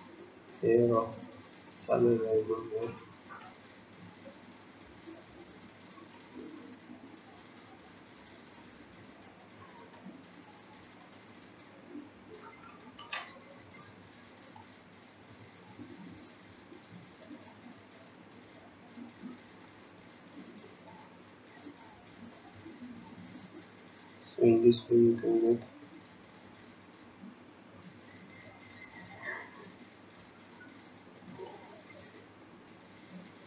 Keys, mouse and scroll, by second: 7.8 click, 16.2-18.1 scroll down 2, 18.8-20.3 scroll up 2, 23.9 click, 26.8 click.